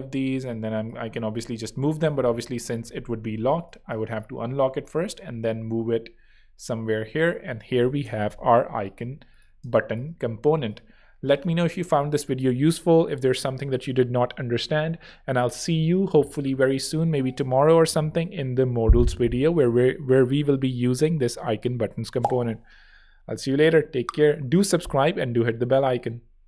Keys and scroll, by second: 1.1 shift+super+z, 1.8 alt+shift+super+z, 2.2 alt+l, 4.7 shift+Right, 7.5 shift+Left, 9.0 z, 9.5 space.